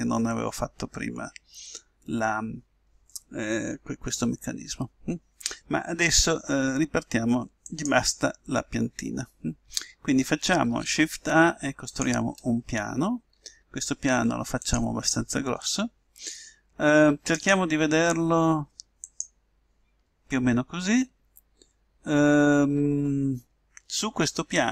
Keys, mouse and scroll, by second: 1.1-1.8 scroll up 1, 1.8-4.4 scroll down 1, 7.7-9.5 drag, 10.6 shift+a, 13.3 s, 17.3-19.1 drag.